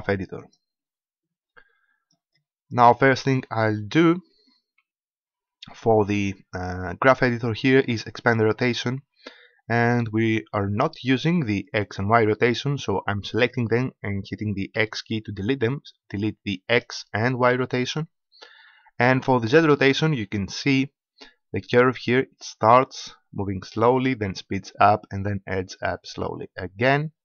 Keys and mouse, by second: 4.5 KP_Decimal, 8.5-13.7 drag, 14.7 x, 16.7 click, 17.5 x, 19.5-21.3 drag.